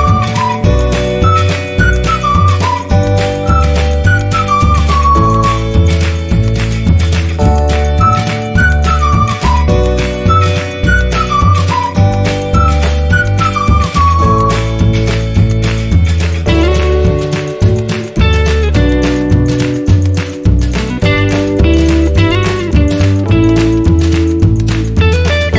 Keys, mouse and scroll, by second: 1.9-2.4 scroll down 1, 3.2 scroll down 1, 4.5 space, 4.6 click, 4.7 space, 4.8 space, 5.8-6.1 scroll up 1, 6.1 click, 7.1-8.8 scroll down 1, 8.8 click, 10.1 ctrl+z, 14.1 click, 14.2 click, 14.3 right click, 17.2 click, 17.8-18.6 scroll up 1, 19.9 click, 21.8 right click, 23.0 click.